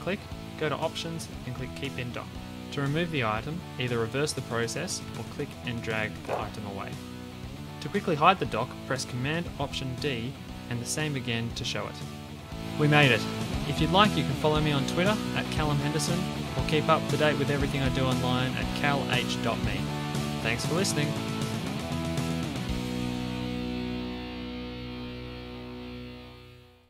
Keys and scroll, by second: 10.0 alt+super+d.